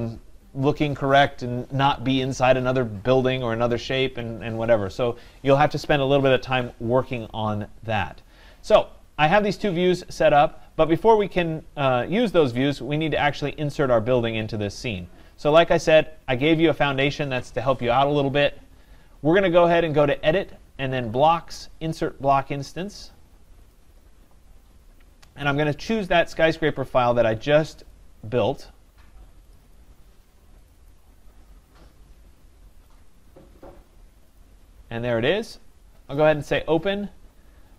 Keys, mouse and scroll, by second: 12.2-14.0 right drag, 15.5 right click, 16.1 scroll, 20.1 click, 23.7 click, 25.9 click, 27.9 click, 29.6 click, 29.8 click, 30.7 click, 31.0 click, 31.7-32.9 scroll, 32.9 click, 33.2 click, 34.4 click, 36.2 click.